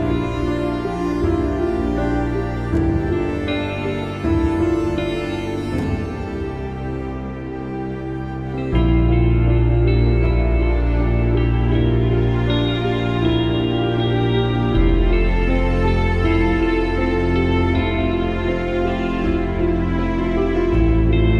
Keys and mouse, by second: 1.5 click, 2.4 alt+click, 6.0 ctrl+=, 9.4 click, 11.0 click, 11.0 typing, 13.8 click, 15.7 alt+click, 18.0 ctrl+=, 19.2 space, 19.4 click, 20.4 click, 21.0 space.